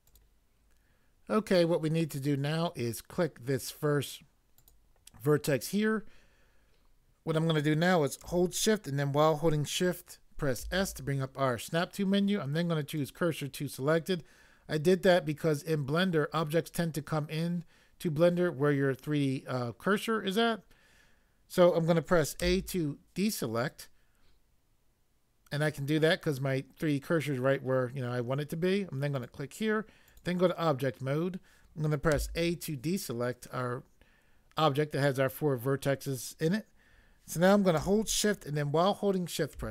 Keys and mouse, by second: 0.0 click, 4.6 click, 10.6 s, 13.0 click, 22.4 a, 29.2 click, 30.1 click, 32.1 a, 39.5 shift+a.